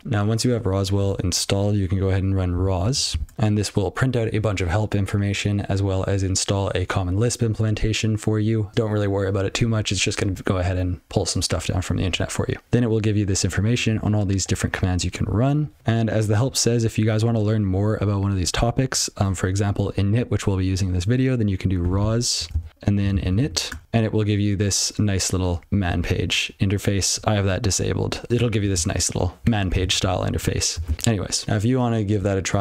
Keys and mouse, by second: 0.0 F12, 1.0 BackSpace, 2.5 r, 2.9 o, 3.2 Return, 13.7 click, 13.9 double click, 14.0 double click, 14.4 click, 14.6 double click, 15.4 click, 15.6 double click, 15.8 F12, 18.4 BackSpace, 18.6 BackSpace, 21.5-23.9 typing, 25.6 ctrl+p, 27.1 BackSpace, 28.3 ctrl+p, 28.7-29.3 ctrl+n, 29.8 alt+>, 30.9 ctrl+p, 31.4 F12, 32.0 BackSpace.